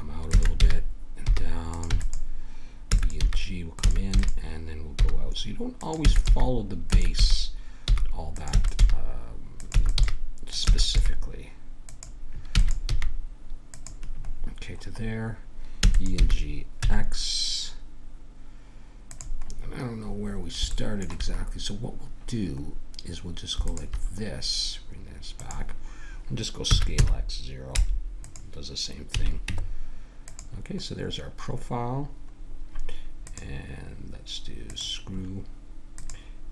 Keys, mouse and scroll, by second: 0.3 middle click, 0.3 e, 1.9 e, 2.9 e, 3.2 g, 3.8 e, 5.0 g, 6.0 e, 6.3 g, 6.9 e, 8.5-10.9 typing, 12.5 e, 12.9 g, 15.8 e, 16.2 g, 19.4 middle click, 20.1-21.2 middle drag, 23.7-27.7 drag, 26.7 s, 29.1 a, 29.5 Tab, 30.9-32.3 middle drag, 33.3-36.5 drag.